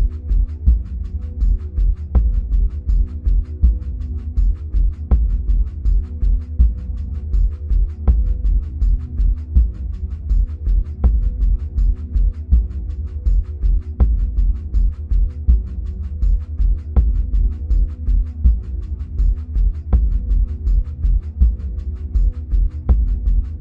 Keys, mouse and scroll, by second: 3.0-7.3 middle drag, 4.5-7.3 scroll down 2, 7.3-15.2 drag, 15.2-20.2 middle drag, 16.5-17.5 scroll up 2, 17.5-20.2 scroll down 2, 20.2-22.8 drag, 22.8-23.6 middle drag.